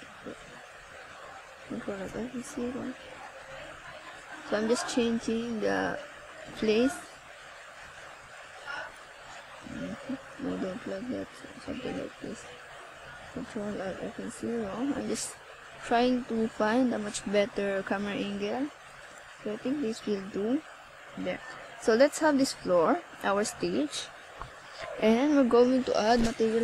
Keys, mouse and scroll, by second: 0.0 click, 3.0 click, 5.6 click, 7.9 click, 9.8 scroll up 2, 11.2 click, 20.5 click, 21.6 ctrl+s, 23.6 scroll up 1, 24.6 KP_0, 25.5 ctrl+s.